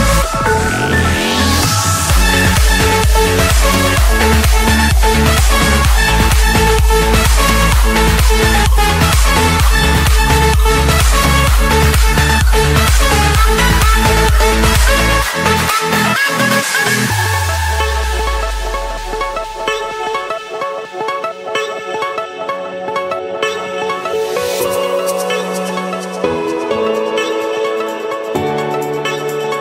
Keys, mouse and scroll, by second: 0.5 click, 0.8 Escape, 2.1-3.2 drag, 4.3-5.4 drag, 6.5 click, 6.8 scroll down 5, 7.5-7.9 scroll up 4, 8.0 Escape, 10.2-11.3 middle drag, 12.3-12.8 typing, 13.7 Return, 15.0-16.1 drag, 15.3 Return, 16.5-17.6 drag, 16.9 Return, 19.7 click, 21.0 click, 21.3-22.0 scroll, 22.6 click, 23.1-23.6 scroll up 9, 24.2 click, 25.1 click, 25.4 scroll down 5, 26.0-26.4 scroll up 1, 26.4 scroll, 26.8 click, 27.2 click, 27.6 click, 28.3-29.6 drag.